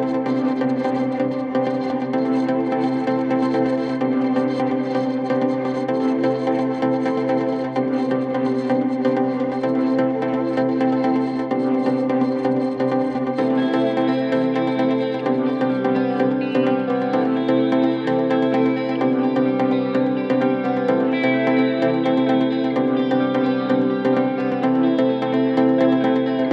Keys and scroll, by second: 15.7 4, 18.5 4, 19.3 shift+i.